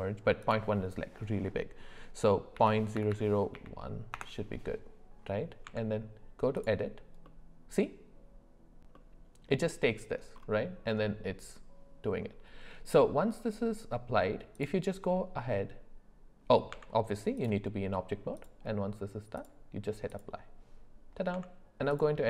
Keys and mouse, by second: 0.4-4.1 drag, 3.1 KP_0, 5.6 Tab, 7.2 middle click, 8.9 middle click, 14.6-16.4 drag, 16.7 Tab, 19.5 click, 21.3 Tab.